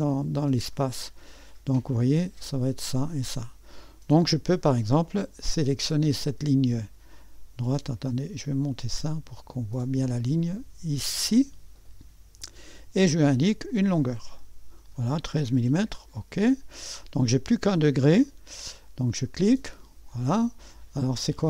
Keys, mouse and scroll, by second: 0.0 click, 1.7-4.8 drag, 8.6-9.9 drag, 11.0 click, 12.4 click, 13.7 click, 15.7 Return, 19.3 click, 21.3-21.4 drag.